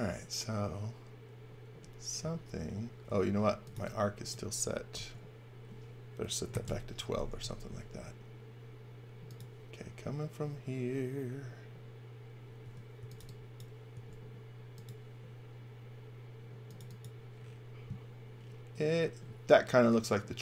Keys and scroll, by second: 3.1-4.9 typing, 6.4 1, 6.6 Return, 12.6-13.9 typing.